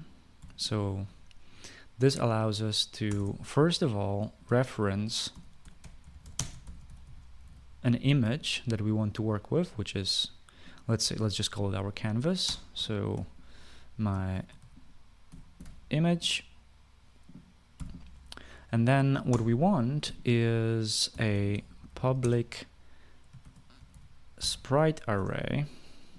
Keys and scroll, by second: 0.0-1.1 typing, 3.7 Return, 3.8 Return, 5.8-8.6 typing, 13.1-13.9 typing, 15.0-16.8 typing, 18.4 ;, 20.0 Return, 21.5-25.7 typing, 25.8 Return.